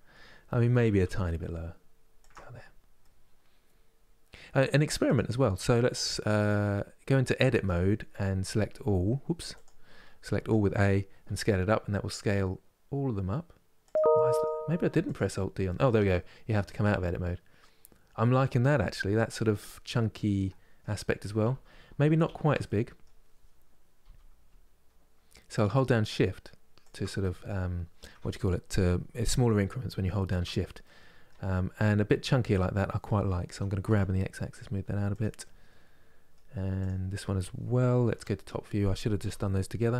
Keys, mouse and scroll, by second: 0.4 g, 2.3-2.7 scroll down 1, 2.7-4.7 middle drag, 4.7-7.2 drag, 7.2 Tab, 8.2 s, 13.8 middle click, 14.6 Tab, 14.7 click, 15.4-18.5 middle drag, 18.5 scroll down 2, 19.3-20.7 middle drag, 20.7 scroll up 2, 21.2 ctrl+z, 21.6 ctrl+z, 22.3-23.7 middle drag, 23.7 s, 30.1 Tab, 30.5 middle click, 31.2 scroll down 1, 31.6-33.2 middle drag, 33.2 g, 35.1-36.5 middle drag, 36.5-37.8 drag, 37.8 KP_7, 38.9 g.